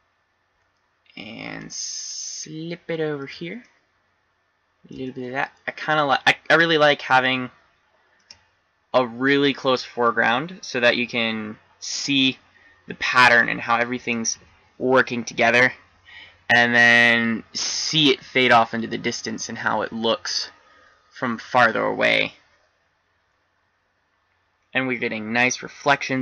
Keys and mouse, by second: 0.4-1.9 middle drag, 3.7 middle click, 4.5-5.6 middle drag, 6.8 middle click.